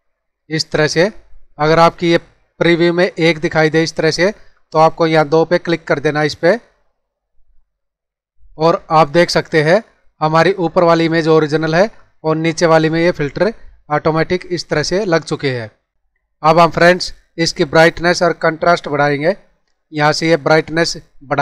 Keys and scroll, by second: 8.1 ctrl+=, 8.8 space, 13.2 space.